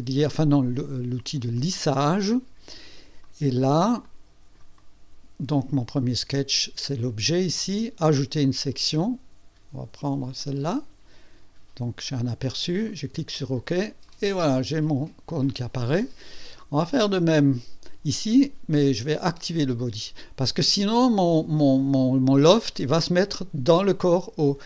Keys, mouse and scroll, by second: 1.6 click, 3.2-4.0 right drag, 4.0-4.7 drag, 4.8 right click, 8.4 click, 8.6 click, 10.4 click, 12.9 click, 14.1-15.8 drag, 17.1 click, 17.5 click, 18.8 click.